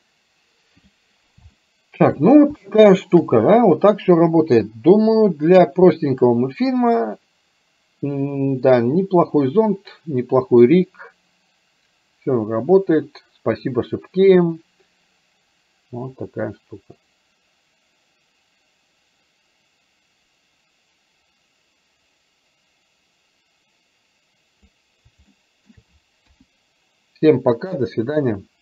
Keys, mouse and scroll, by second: 1.6 shift+middle click, 2.7 shift+middle click, 5.1-24.9 drag, 25.4 shift+middle click, 26.4 KP_1.